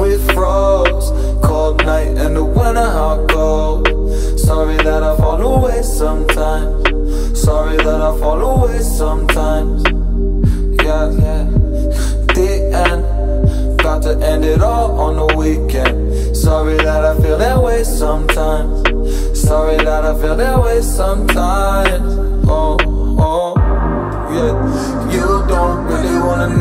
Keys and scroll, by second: 0.6 ctrl+j, 2.2 ctrl+t, 5.4 Right, 7.1 Right, 12.1 ctrl+j, 12.6 ctrl+t, 17.6 Right, 20.2 Right, 20.7 Right, 21.7 Return.